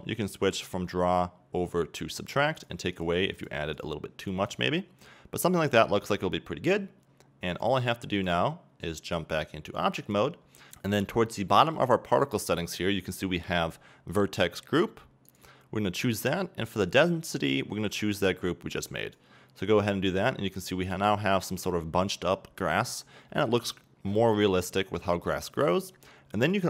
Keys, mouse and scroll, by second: 10.2-19.8 drag, 19.8-21.1 middle drag, 21.1-21.7 scroll up 2, 21.7-22.2 scroll down 2, 22.2-23.4 middle drag, 24.8-25.2 middle drag, 25.2 scroll up 1.